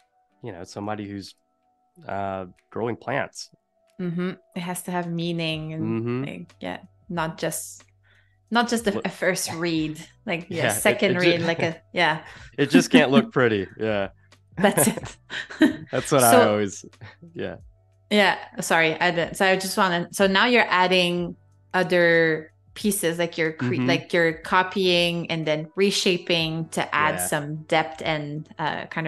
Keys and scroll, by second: 2.1 v, 12.2 z, 13.2 v, 15.2 a, 18.4 v, 19.1 a, 24.9 Escape, 27.2 -.